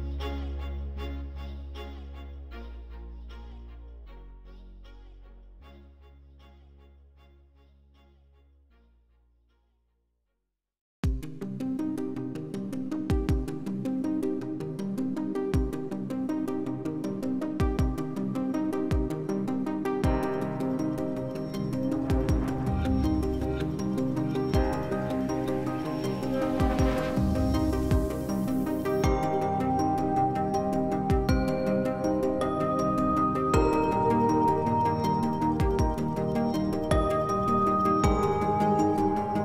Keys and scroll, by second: 2.9 s, 7.8 s, 14.8 s, 15.4 ctrl+z, 21.1 2, 23.3 4, 27.0 2.